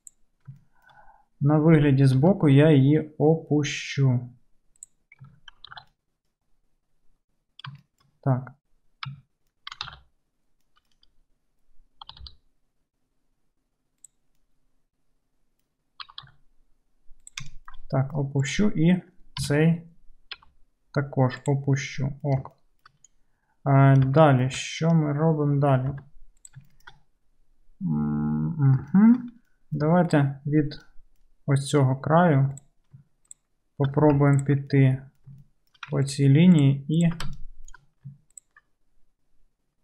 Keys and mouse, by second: 0.1 click, 0.1 middle click, 2.2 g, 5.3 Tab, 5.5-6.0 alt+drag, 5.8 alt+z, 6.2 click, 6.9 click, 7.7-8.4 shift+drag, 9.0-10.8 right drag, 9.1 Tab, 10.0 alt+z, 10.8-17.5 drag, 12.1 g, 16.1 g, 17.6 shift+click, 17.8 shift+click, 18.0 click, 18.5 middle click, 18.6-23.0 drag, 19.4 KP_3, 20.4 g, 23.0-25.8 right drag, 26.0 1, 26.0 right click, 26.6 shift+middle click, 27.0-33.1 drag, 29.9 2, 30.1 right click, 33.1-35.3 shift+right drag, 34.4 ctrl+click, 34.4 ctrl+middle click, 35.3 shift+middle click, 35.7 shift+click, 35.9 ctrl+right click, 36.6 ctrl+middle click, 36.7 ctrl+right click, 37.0 ctrl+middle click, 37.2 ctrl+right click, 37.3 shift+click, 37.4-38.9 shift+middle drag, 38.7 ctrl+click, 38.9-39.8 drag.